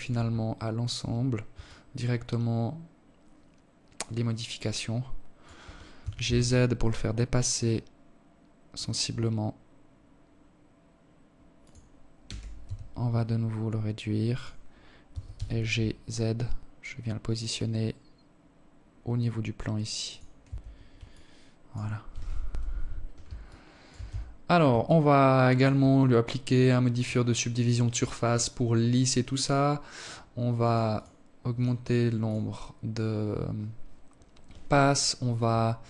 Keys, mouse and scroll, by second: 0.1 alt+click, 4.4 g, 10.7 s, 13.5 g, 18.8 Tab, 19.5 alt+click, 20.9 KP_7, 21.9 alt+shift+click, 22.5 Tab, 22.8 scroll up 2, 23.3 alt+click, 24.9 click, 25.4 click, 26.1 click, 29.1 click, 29.3 click, 30.0 click, 30.7 click.